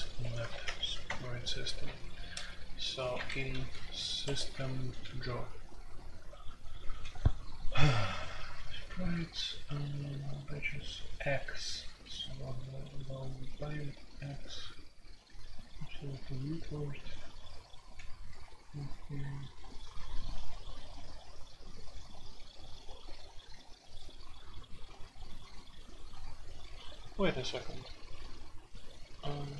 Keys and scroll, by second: 0.2-0.6 typing, 1.0 Return, 3.1-6.8 typing, 4.2 Escape, 8.3-9.4 typing, 10.5-12.8 typing, 13.9 l, 14.3 l, 16.0 j, 17.3-17.9 typing.